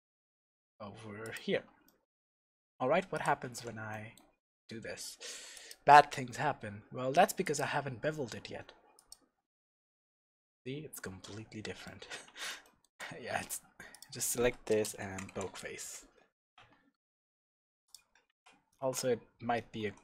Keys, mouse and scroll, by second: 1.3 click, 1.5 Tab, 1.8 middle click, 2.3 Tab, 2.6 scroll up 2, 2.8 Tab, 2.8 middle click, 3.1 click, 3.6 ctrl+1, 3.9-5.5 middle drag, 5.5-9.6 drag, 9.9-13.9 middle drag, 12.0 scroll up 2, 12.3 Tab, 13.9 click, 14.7 space, 16.0 Return, 16.5 Tab, 17.0 middle click, 17.8 click, 18.1 scroll up 1, 18.3 Tab, 18.8 alt+a, 19.8 2.